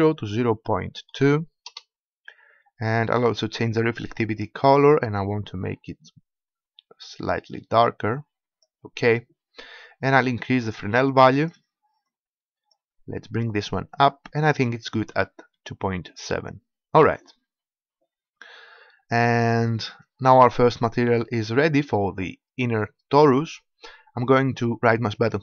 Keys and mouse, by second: 0.5-4.0 middle drag, 4.0-5.8 drag, 5.8-10.1 middle drag, 10.1-13.8 drag, 25.2-25.4 right drag.